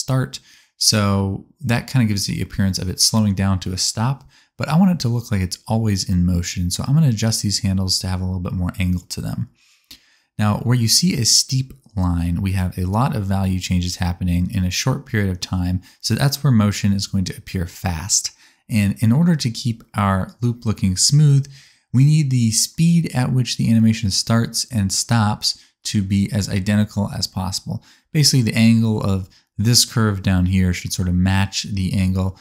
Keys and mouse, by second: 4.0-5.9 middle drag, 7.0 click, 8.3 click, 8.7 g, 19.8 middle click, 20.6-25.8 middle drag, 30.3 space, 31.7 click.